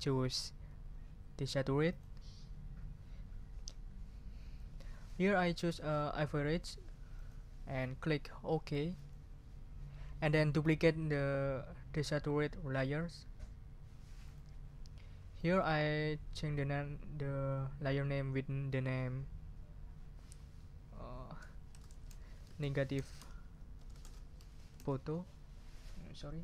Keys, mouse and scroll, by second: 1.9 click, 4.5 click, 7.1 click, 9.0 click, 14.2 click, 15.3 click, 21.6-26.2 typing.